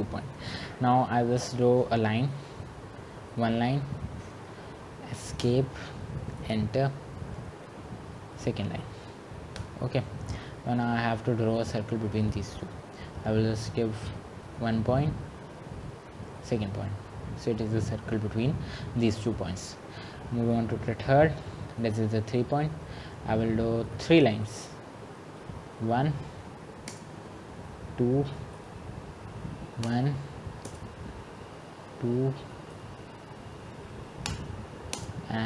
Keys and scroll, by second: 6.7 Escape, 9.9 Return, 30.1 Return, 31.0 Escape, 34.6 Return, 35.2 Escape.